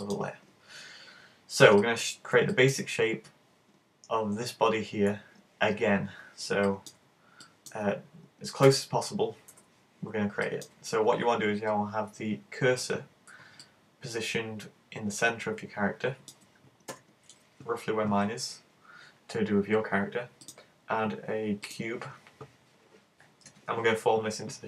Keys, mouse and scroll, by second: 1.8 middle click, 2.5 middle click, 6.7 middle click, 7.1-7.7 scroll up 3, 7.4 shift+middle click, 7.7 alt+shift+scroll down 1, 8.6 KP_1, 9.4 scroll up 1, 10.5 shift+middle click, 13.7 middle click, 16.8 KP_1, 20.4 click.